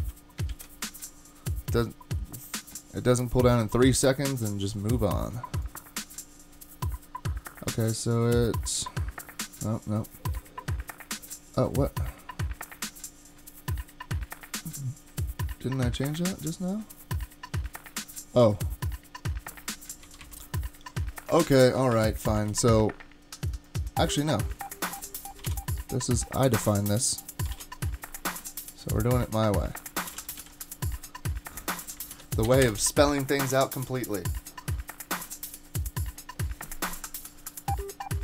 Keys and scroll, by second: 0.0-0.2 typing, 0.5 super+s, 20.0 super+z, 20.2 super+z, 21.9 shift+super+z, 25.4 typing, 27.2-28.0 typing, 29.8-30.6 typing, 32.1 super+k, 32.6 Return.